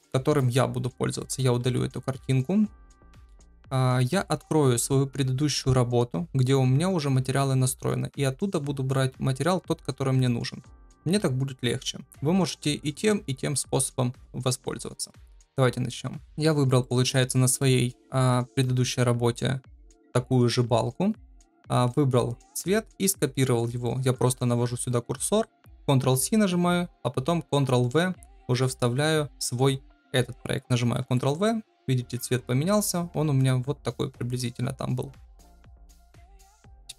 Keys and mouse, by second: 1.1 click, 2.9 click, 16.8 shift+middle click, 17.5-17.8 shift+middle drag, 18.3 KP_0, 31.0 ctrl+v.